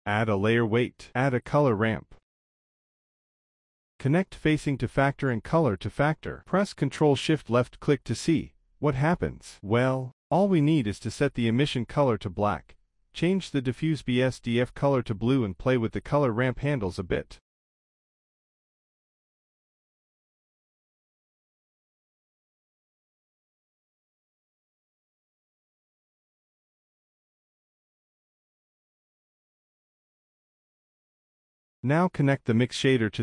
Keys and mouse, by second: 3.2 shift+a, 5.0-5.9 drag, 6.6-7.3 drag, 7.6 click, 8.2 shift+c, 9.1 click, 11.7-12.9 drag, 13.5 click, 15.8-16.7 drag, 17.2-18.4 drag, 20.1-21.0 middle drag, 21.7 KP_0, 23.1-24.3 drag, 24.5-25.4 drag, 25.5 drag, 26.3-26.9 drag, 27.2-27.8 drag, 28.5 middle click, 31.4 middle click, 32.2 drag, 32.5 shift+c, 32.9 click.